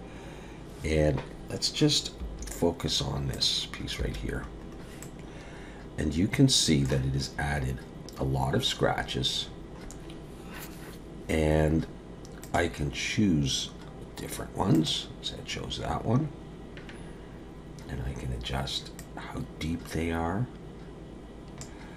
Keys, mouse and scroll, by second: 2.2 /, 3.3 click, 4.0 /, 4.6-5.0 scroll up 3, 5.0 middle click, 8.3-12.5 scroll down 12, 12.5 click, 19.0 click.